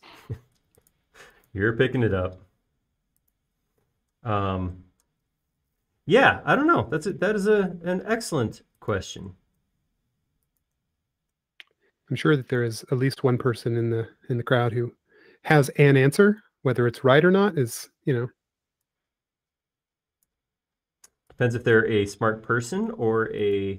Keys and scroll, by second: 5.5 m, 7.4 typing, 8.8 typing, 15.3 p, 22.3 e.